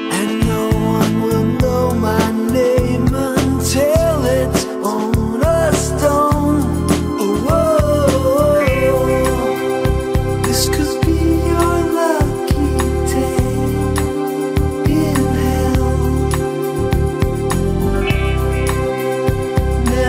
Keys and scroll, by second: 2.9 scroll, 19.9 alt+scroll.